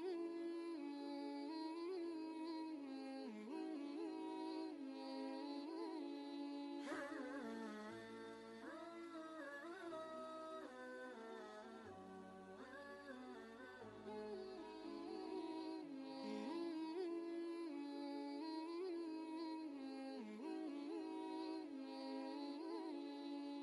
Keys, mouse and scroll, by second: 3.1 click, 5.5-6.5 typing, 7.8-8.7 typing, 9.8 ctrl+Return, 12.3-19.5 drag, 19.5-21.7 alt+drag, 21.7-23.6 drag.